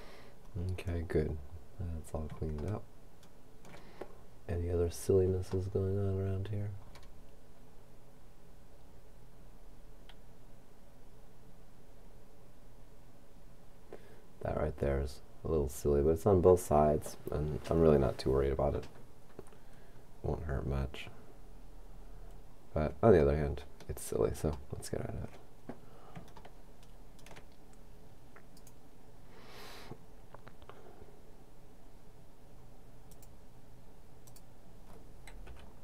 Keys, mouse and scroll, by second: 2.8 shift+middle click, 4.0-5.3 shift+scroll up 2, 5.3 scroll up 1, 5.7-7.0 shift+middle drag, 7.0-8.0 shift+scroll down 1, 22.5-23.6 scroll up 1, 23.8-24.9 shift+middle drag, 25.7-26.4 scroll up 1, 26.4 middle click, 28.6 right click, 33.2 click, 34.3 click, 35.5 c.